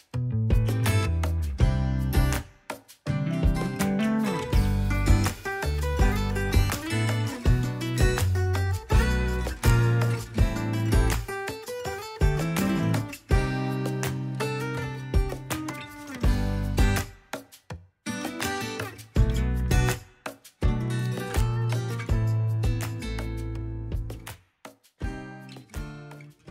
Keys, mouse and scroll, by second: 0.3 f, 0.4-2.9 drag, 2.9 f, 3.0-4.3 drag, 4.3 f, 4.4 click, 4.9 f, 5.0-6.3 drag, 6.3 middle click, 6.6 click, 6.6 middle click, 6.8-7.1 scroll down 2, 7.1 KP_3, 7.2 alt+z, 7.2 scroll up 2, 7.4 click, 7.8 click, 8.2 alt+z, 8.4 click, 9.1 alt+z, 9.1 scroll down 3, 9.2 shift+middle click, 9.8 KP_1, 10.0 scroll up 2, 10.1 ctrl+Tab, 10.1 ctrl+a, 10.3 click, 10.7 scroll down 2, 10.8-11.5 shift+middle drag, 11.8 KP_1, 12.0-12.4 scroll up 4, 12.2 ctrl+Tab, 12.5 ctrl+Tab, 12.6 click, 13.3 ctrl+Tab, 13.4-14.3 scroll down 5, 13.8 shift+d, 14.0 ctrl+z, 14.3 click, 14.3 shift+s, 14.5 shift+d, 14.6 scroll up 4, 15.0 g, 15.1 scroll down 1, 15.7 ctrl+Tab, 15.8 click, 16.7 f, 16.8 click, 17.1 ctrl+z, 17.3 f, 17.3 click, 18.1 alt+z, 18.2 click, 19.1 scroll up 2, 19.2 middle click, 19.3 scroll down 1, 19.4 shift+middle click, 19.6 click, 20.2 middle click, 20.3 click, 20.6 KP_1, 20.7 scroll up 4, 20.9 click, 21.0 ctrl+z, 21.1 f, 21.3-22.4 drag, 22.4 ctrl+z, 22.4 click, 23.1-23.6 scroll down 4, 23.3 middle click, 23.7 middle click, 23.8 scroll up 7, 23.9 middle click, 24.0 shift+middle click, 24.1 click, 24.5 middle click, 24.9-26.5 drag.